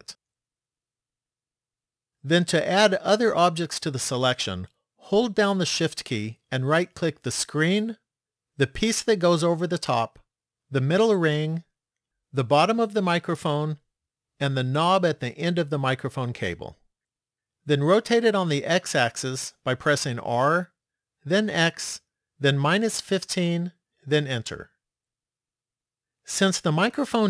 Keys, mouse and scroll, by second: 1.3 click, 7.2 shift+right click, 9.6 shift+right click, 10.8 shift+right click, 12.4 shift+right click, 14.4 shift+right click, 19.9 r.